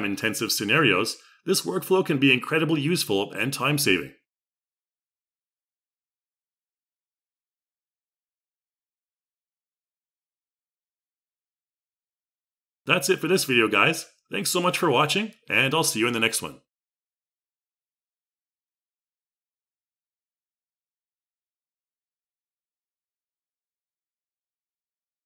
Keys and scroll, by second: 13.7 y, 16.1 x.